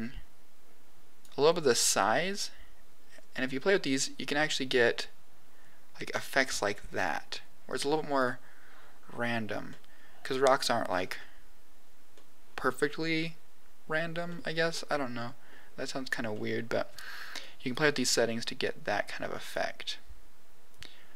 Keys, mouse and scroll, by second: 1.7 click, 2.3 click, 6.0-8.1 drag, 9.6 middle click, 10.9-11.5 scroll up 4, 12.1 middle click, 14.2 middle click, 14.8 scroll down 1, 15.1 middle click, 15.9 scroll down 1, 16.3 middle click, 17.3 click, 18.0 click, 20.7 click.